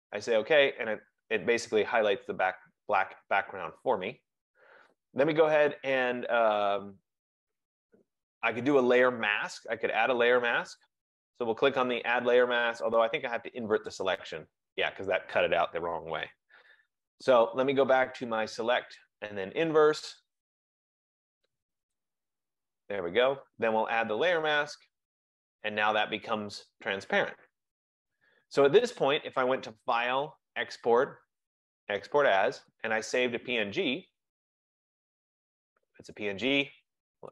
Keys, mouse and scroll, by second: 6.8 right click, 7.9 click, 13.9 click, 16.8 ctrl+z, 19.2 click, 22.0 click, 24.6 click, 29.4 click, 32.8 click.